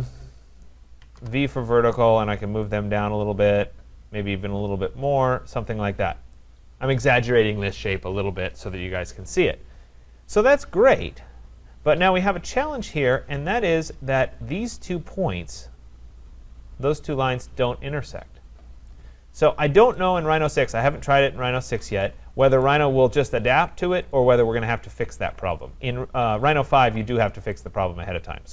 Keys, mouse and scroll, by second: 0.0-1.6 typing, 2.2 click, 5.2 click, 5.8 scroll, 6.8 scroll down 3, 6.9 right click, 10.2-10.9 scroll up 5, 11.0-12.0 scroll, 13.1 right click, 13.4-14.2 scroll, 18.9 right click, 19.1-19.9 scroll, 20.5 right click, 20.9-21.4 scroll, 21.4 Escape, 21.6 Escape, 22.6 right click, 24.1 shift+click, 25.6 shift+click, 26.5 shift+click, 27.7 shift+click.